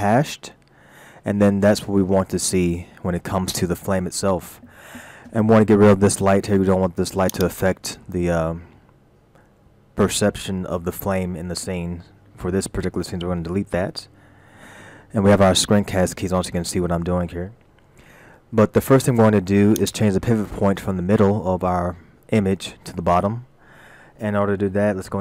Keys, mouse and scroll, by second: 3.9-6.1 scroll down 6, 6.1 shift+middle click, 7.3 click, 14.4 Delete, 15.7-16.0 scroll up 2, 18.0 shift+middle click, 19.0-19.8 scroll up 4, 19.8 click.